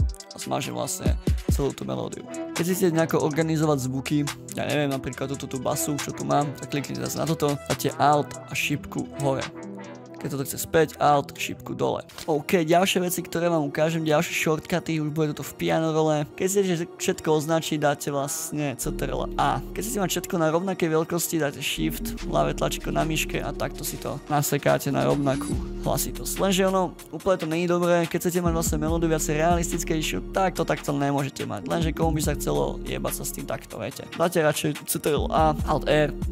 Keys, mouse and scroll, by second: 8.1 alt+Up, 10.7 alt+Down, 12.0 alt+Down, 12.1 scroll down 4, 16.3 scroll up 2, 19.3 ctrl+a, 23.2 shift+click, 32.2 right click, 33.1 double click, 33.3 double click, 33.5 double click, 33.6 double click, 34.8 ctrl+a, 35.6 alt+r.